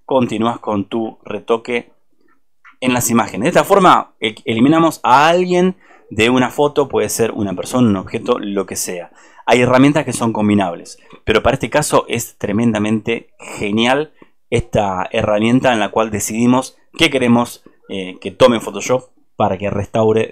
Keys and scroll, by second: 2.9 ctrl+v.